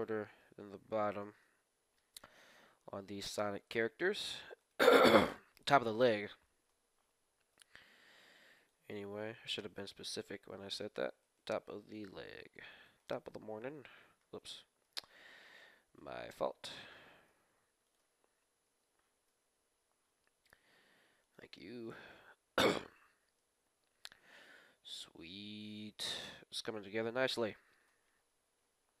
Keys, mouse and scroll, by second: 0.0-2.2 middle drag, 0.2 Tab, 2.5 Tab, 2.5 middle click, 2.5 KP_1, 2.9 middle click, 3.3 Tab, 4.6 right click, 5.3 middle click, 5.5 middle click, 5.5 right click, 6.5 middle click, 6.5 right click, 6.6 KP_1, 6.7 middle click, 6.7 right click, 7.5 g, 8.6 g, 11.2-14.5 right drag, 12.3 z, 13.2 shift+z, 14.8 shift+z, 15.9 z, 16.6 z, 17.2 g, 18.1 g, 21.9 a, 22.3-23.4 scroll up 1, 23.0 Tab, 23.4-25.2 middle drag, 26.1-28.6 middle drag, 27.8 KP_1, 28.6-29.0 scroll down 1, 28.6 Tab.